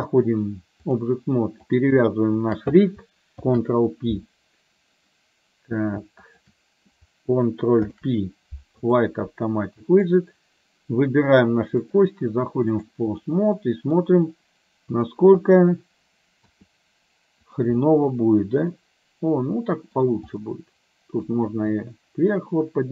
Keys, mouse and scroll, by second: 1.8 click, 2.4 shift+click, 3.4 ctrl+p, 6.3 shift+click, 10.2 click, 12.0 click, 13.3 middle click, 16.5 r, 17.9-20.0 middle drag, 20.5 middle click, 21.5 r.